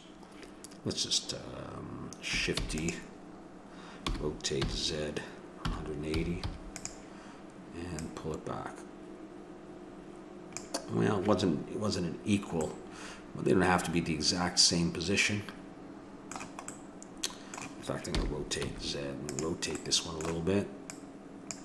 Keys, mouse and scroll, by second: 2.6 shift+d, 4.0 r, 8.1-9.7 drag, 12.7-14.4 middle drag, 16.7-18.7 middle drag, 18.2 r, 20.9 click.